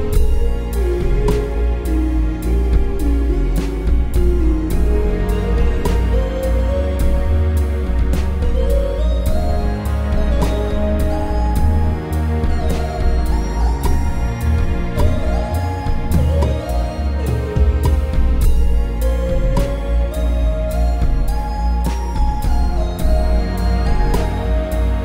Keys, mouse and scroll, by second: 9.2 m.